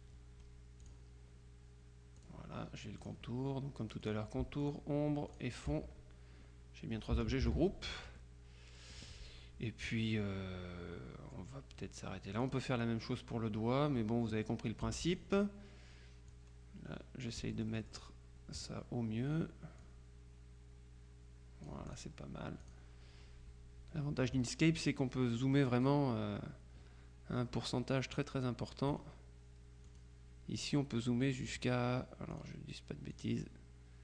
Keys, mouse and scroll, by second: 0.9 click, 2.3 click, 3.1 click, 4.1 click, 5.4 click, 7.5 ctrl+g, 8.3-10.4 drag, 12.5 click, 14.9 F2, 15.2 click, 16.4-18.6 drag, 19.9-22.5 drag, 22.7 click, 23.3-24.5 scroll up 1, 24.9 middle click, 25.5 scroll up 1, 25.6 middle click, 25.8 click, 29.0 right click, 30.0 click, 30.7 right click, 32.4 click, 33.2 click.